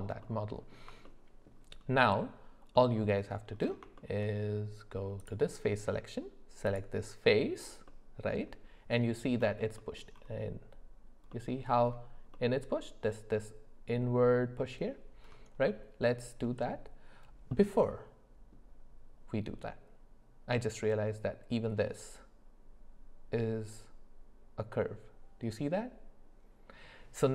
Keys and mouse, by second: 0.2 middle click, 1.0 shift+middle click, 2.7 middle click, 4.0 shift+middle click, 5.2 click, 6.7 click, 7.9 click, 7.9 middle click, 7.9 right click, 15.7 click, 15.7 middle click, 15.7 right click, 17.5-18.5 drag, 17.5-18.5 middle drag, 17.5-18.5 right drag.